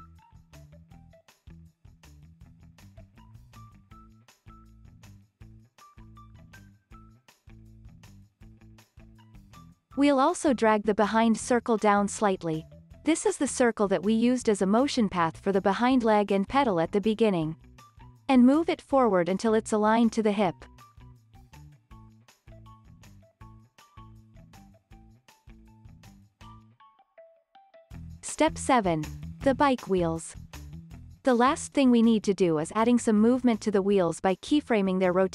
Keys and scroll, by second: 21.6 space, 32.4 super+s.